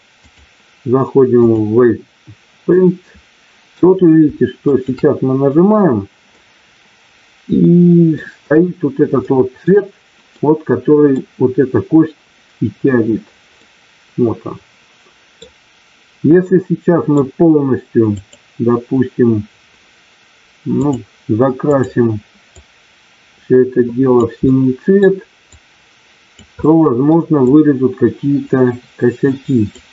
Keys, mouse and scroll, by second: 0.4-1.6 drag, 2.7 middle click, 4.6 shift+click, 6.2-8.1 middle drag, 9.3 middle click, 10.4 middle click, 13.5-15.4 middle drag, 16.4 middle click, 18.2-20.2 drag, 20.9 click, 22.6-24.1 drag, 24.4 middle click, 25.5 click, 26.6 middle click, 27.5-29.8 drag.